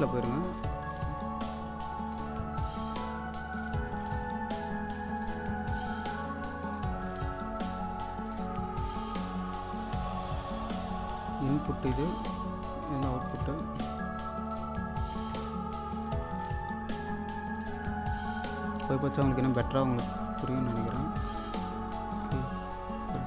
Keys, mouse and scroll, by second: 0.5-2.9 drag, 3.0-3.6 scroll up 1, 5.2-11.9 drag, 11.9-14.3 typing, 12.7 click, 15.0 click, 15.3-16.7 typing, 15.6 click, 16.6 scroll down 1, 18.2 click, 18.6-19.7 scroll up 1, 20.0-21.9 drag, 21.9-22.3 scroll up 1, 22.9 click.